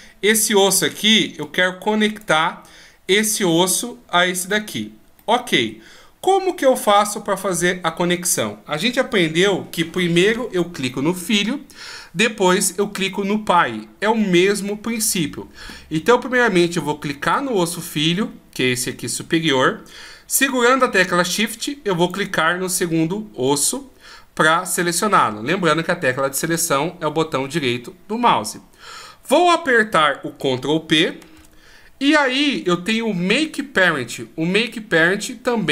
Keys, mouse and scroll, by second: 1.3 click, 5.0 middle click, 17.1 right click, 21.8 shift+right click, 31.2 ctrl+p.